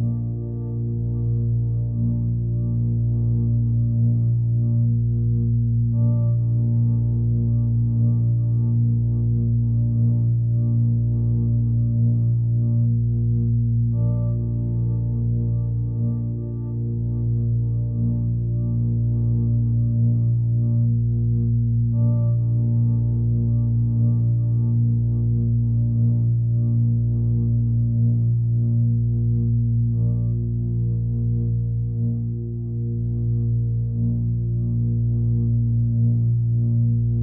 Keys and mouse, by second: 5.5-12.7 drag, 14.9-21.3 drag, 24.0-24.8 drag, 25.0-26.9 drag, 27.3 click, 29.0 click, 30.4-32.7 drag, 33.3-34.5 drag, 35.2 click, 36.4-37.2 drag.